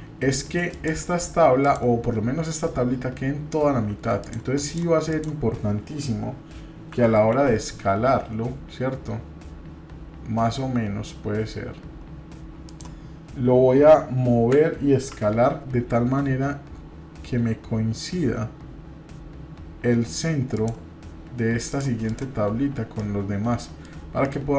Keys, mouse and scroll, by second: 0.7 click, 1.6 click, 4.2-5.5 shift+drag, 6.9 s, 21.7 drag, 22.0 click, 22.9-23.8 middle drag, 24.2-24.5 middle drag.